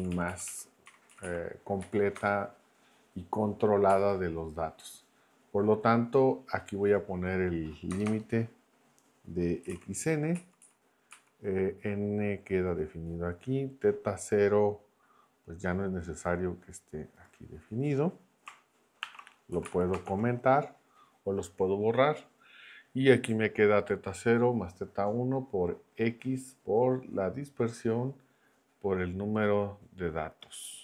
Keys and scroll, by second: 0.4 Right, 0.8 1, 1.1 Right, 1.8 Left, 2.1 BackSpace, 3.9 Down, 7.9 BackSpace, 9.4-10.2 typing, 10.3 Right, 11.1 Down, 19.0 shift+3, 19.5 Down, 19.6 Left, 20.0 shift+3.